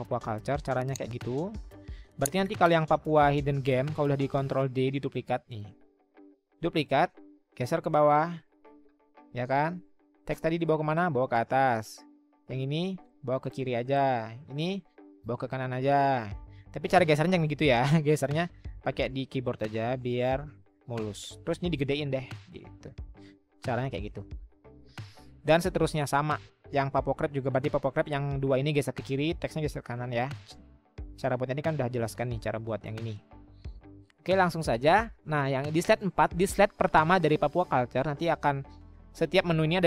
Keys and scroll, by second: 6.4 ctrl+d, 17.5 ctrl+z, 18.4-20.3 Right, 23.5 Delete.